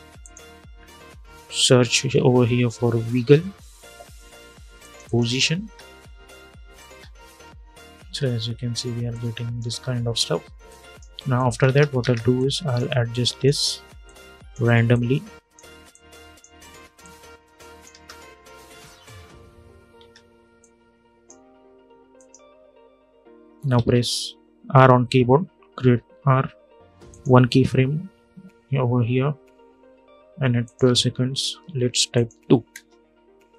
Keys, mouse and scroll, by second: 2.1-3.5 typing, 4.5 click, 5.3 space, 8.8 click, 9.4 space, 10.4 click, 11.4 space, 12.1-17.6 drag, 17.6 space, 19.7 space, 20.3-21.9 drag, 23.4 ctrl+a, 25.5 r, 26.8 click, 27.9 -, 28.3 -, 30.3 click, 32.4 Return, 33.4 click.